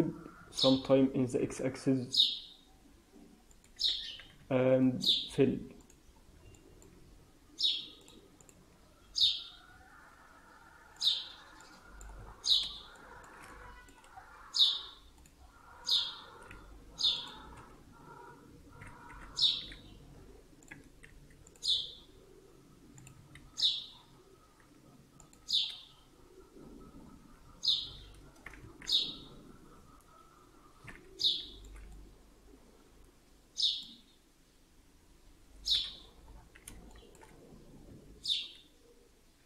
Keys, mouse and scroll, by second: 3.6 f, 4.0 scroll down 3, 4.3 Tab, 5.7 click, 6.6 alt+middle click, 7.9 click, 9.2 Tab, 9.6 Tab, 10.9 click, 11.5 middle click, 12.1 Tab, 12.2 scroll up 4, 12.8 shift+middle click, 13.4 middle click, 14.0 scroll up 2, 15.1 click, 15.8 click, 16.4 z, 17.4 z, 19.0 g, 21.0 ctrl+r, 23.3 ctrl+r, 27.6 shift+z, 28.3-28.8 scroll down 6, 28.6 Tab, 30.2 scroll down 3, 31.1 click, 31.8 middle click, 35.6 KP_1, 36.2-36.8 scroll up 4, 36.8 shift+middle click, 37.2-37.6 scroll up 3, 37.6 scroll down 3, 37.8 Tab, 38.8-39.4 scroll down 1.